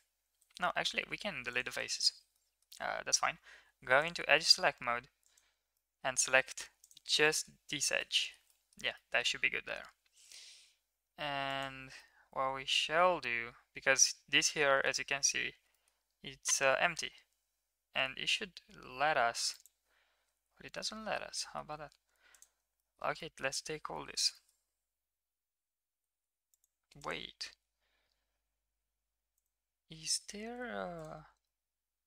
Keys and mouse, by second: 0.7 x, 1.8 shift+middle drag, 2.3 middle drag, 2.8 2, 4.3 shift+middle click, 5.2 alt+click, 5.7 middle click, 6.8 click, 7.2 shift+middle click, 8.1 shift+middle click, 8.5 middle click, 8.9 middle click, 9.7 g, 11.9-14.9 middle drag, 15.7 middle click, 16.5 g, 20.8 middle click, 21.3 middle click, 22.3 alt+click, 22.8 shift+middle click, 23.2 middle click, 23.9 shift+middle click, 24.3 middle click, 24.7 g, 27.5 ctrl+x, 28.7 x, 30.0 ctrl+z, 30.4 x, 31.5-32.0 middle drag.